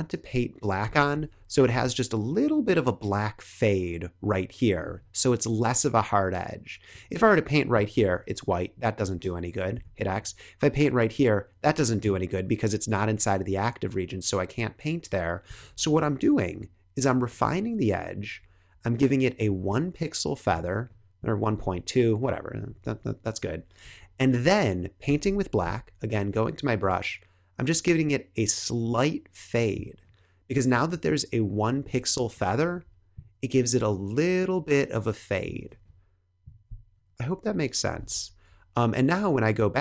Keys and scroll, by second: 1.1 super+=, 7.9 super+z, 9.7 x, 15.5 l, 25.5 b, 32.1 space, 35.6 space, 36.9 super+-.